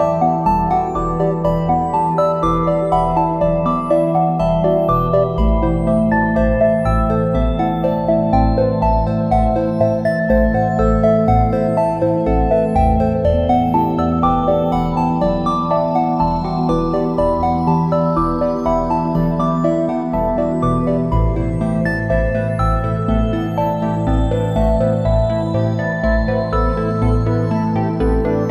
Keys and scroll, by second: 0.7 space, 5.2 a, 5.7 space, 12.5 space, 13.2 `, 13.4 space, 14.6 space, 17.0 space, 22.3 a, 26.1 space.